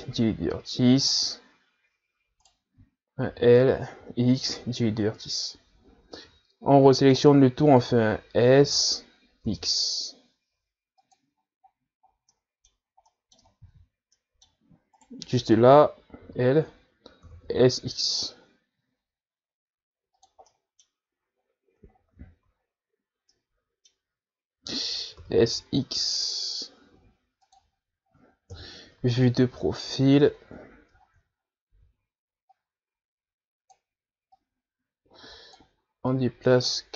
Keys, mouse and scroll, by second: 0.5 Delete, 2.3 right click, 3.7 Right, 4.5 l, 5.2 Delete, 7.4 a, 9.9 s, 12.7 scroll down 1, 13.3 scroll down 3, 13.5-14.9 middle drag, 14.9 ctrl+z, 15.4 middle click, 16.2 right click, 17.5 l, 18.5 s, 21.7 middle click, 22.3-22.8 scroll up 2, 23.2-23.6 scroll up 3, 23.6 scroll down 1, 23.9-24.6 scroll up 1, 24.6 middle click, 25.4-26.4 scroll up 1, 26.4 s, 29.7 KP_3, 31.0-33.0 scroll up 11, 33.0 z, 33.8-36.9 drag.